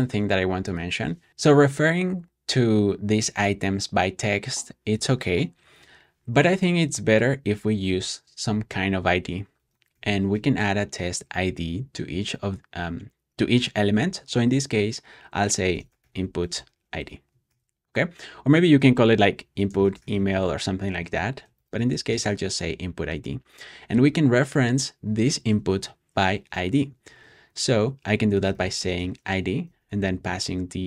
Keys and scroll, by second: 1.3 typing, 7.8 typing, 9.2-10.7 typing, 15.4-16.6 typing, 17.4 super+s, 18.7-22.2 typing, 25.3 shift+super+[, 27.0 shift+[, 28.2-29.3 typing, 30.2 shift+super+[, 30.8 shift+super+].